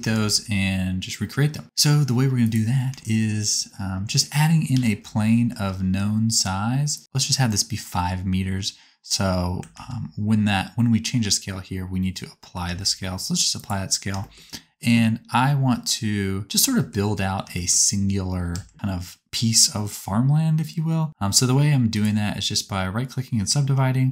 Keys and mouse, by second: 0.1 shift+a, 2.4 middle click, 4.7 n, 7.0-9.0 drag, 9.7 ctrl+a, 12.0-13.4 drag, 12.6 ctrl+a, 16.4 shift+middle click, 18.6 Tab, 19.9-21.1 right drag, 21.1-22.6 drag, 23.7 shift+r.